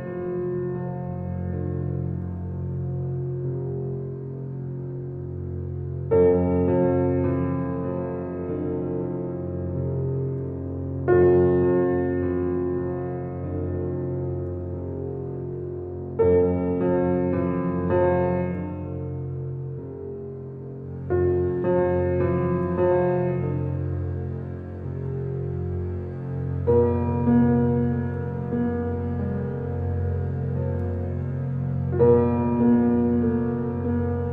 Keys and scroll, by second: 7.9 b, 11.0 ctrl+d, 11.5 ctrl+d.